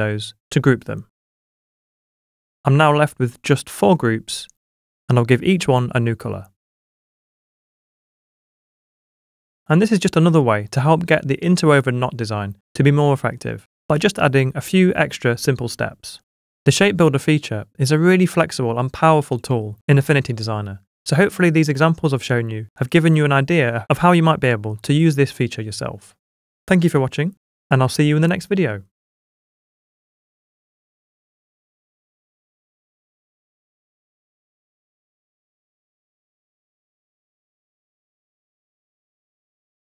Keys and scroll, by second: 0.4 super+g, 12.6 super+d.